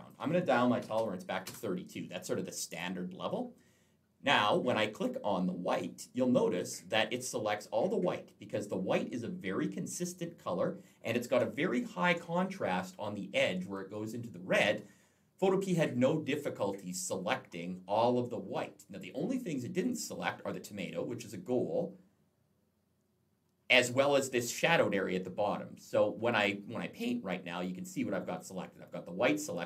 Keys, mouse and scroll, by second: 0.6-1.3 typing, 1.3 Return, 2.6 click, 5.6 click, 11.3-12.3 alt+scroll up 1, 15.5-16.6 scroll up 3, 18.0-18.8 scroll down 3, 18.9-20.5 scroll up 2, 21.4-22.3 scroll down 2, 22.3 scroll up 2, 22.5-23.0 scroll down 2, 23.0-23.5 scroll up 2, 27.4 click, 28.5 click.